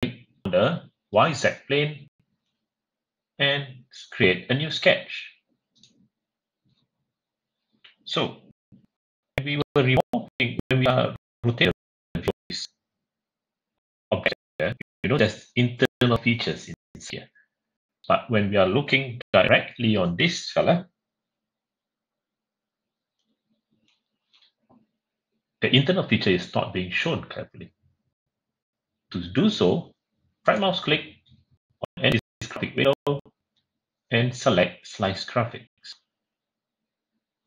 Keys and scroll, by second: 23.0 Page_Up.